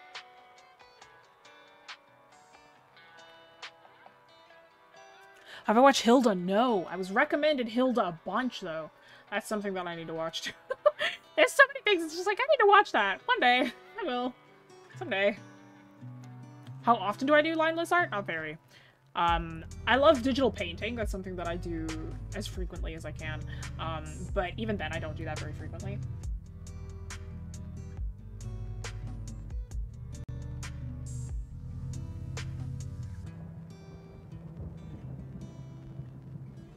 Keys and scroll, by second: 8.5-9.3 scroll up 1, 10.7-11.1 scroll up 1, 13.6 scroll down 1.